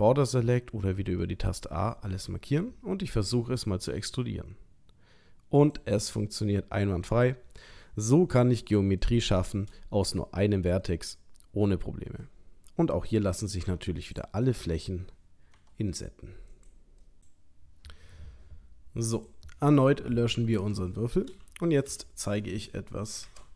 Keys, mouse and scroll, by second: 1.9 middle click, 3.9 e, 6.1 middle click, 9.0 shift+middle click, 10.8 middle click, 13.6 3, 14.0 click, 15.5 i, 17.0 middle click, 19.1 click, 20.6 Tab, 21.9 Delete, 23.2 shift+a.